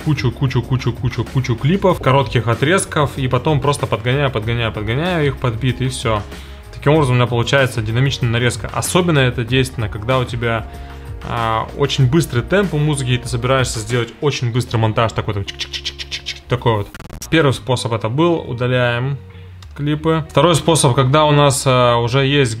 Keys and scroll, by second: 19.7 BackSpace.